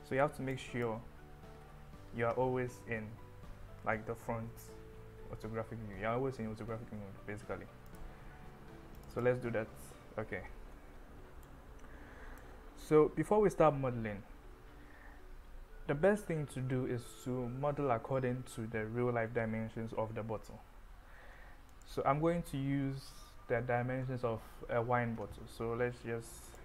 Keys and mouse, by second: 0.6-0.9 drag, 1.7 Delete, 2.4 KP_1, 5.7 shift+a, 11.5 click, 21.7 click.